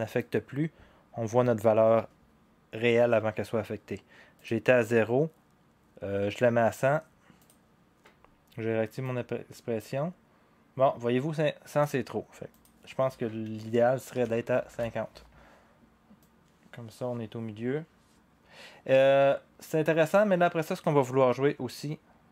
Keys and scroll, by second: 13.9-14.7 typing, 18.0 typing.